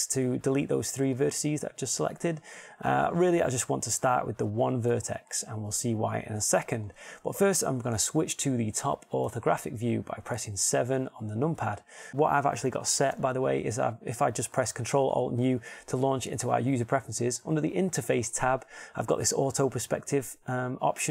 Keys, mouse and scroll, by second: 0.5 x, 5.3-9.8 middle drag, 9.8 KP_7, 9.8 KP_8.